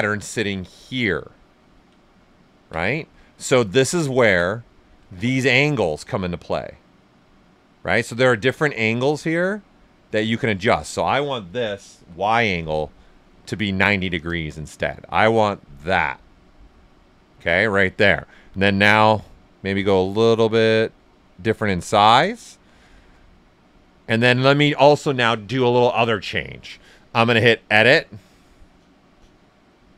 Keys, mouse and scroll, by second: 2.1 ctrl+right click, 3.9 ctrl+right click, 5.8 ctrl+alt+right click, 6.0-9.5 drag, 9.5-11.8 drag, 11.6-12.4 typing, 15.9 right click, 16.8-19.8 ctrl+right drag, 19.8-22.0 drag, 22.0 right click, 23.8-26.7 ctrl+right drag, 27.4 click.